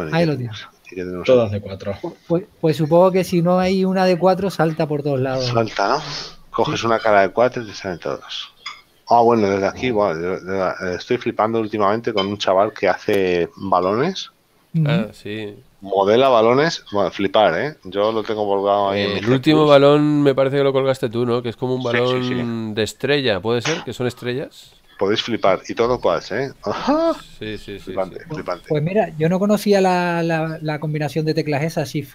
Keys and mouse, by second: 6.7 middle click, 18.5 middle click.